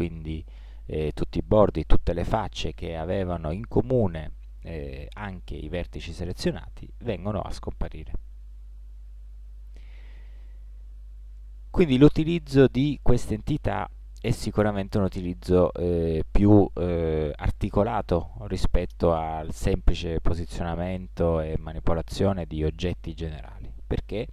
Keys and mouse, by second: 6.8-8.7 middle drag, 9.1 ctrl+z, 10.1-12.0 middle drag, 14.2-16.2 middle drag.